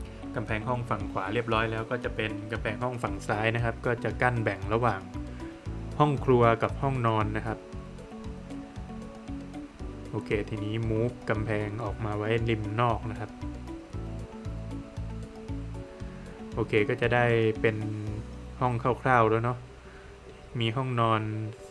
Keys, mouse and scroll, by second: 0.9 click, 3.5 click, 5.7 click, 9.0 space, 9.6 Escape, 10.3 click, 12.0 scroll up 2, 12.5 space, 13.6 click, 14.8-15.2 scroll down 1, 15.3 middle click, 15.7 scroll down 1, 16.3 middle click, 17.5 middle click, 18.7 middle click.